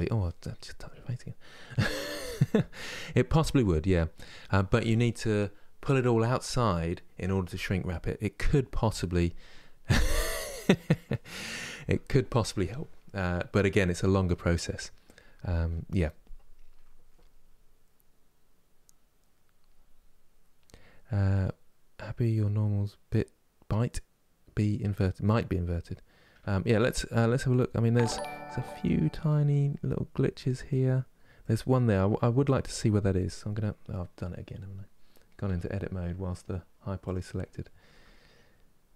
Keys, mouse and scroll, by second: 34.6 Tab, 36.2 Tab, 36.7 click, 37.5 Tab.